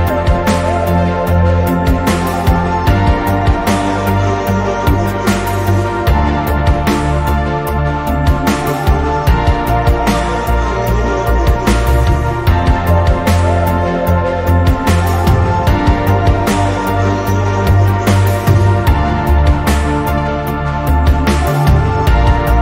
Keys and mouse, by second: 1.5-3.7 drag, 6.3-9.1 drag, 12.0 click, 14.6 click, 15.7 click, 16.5 click, 18.9 click, 19.7 click, 20.3 click, 20.9 click, 21.7 click.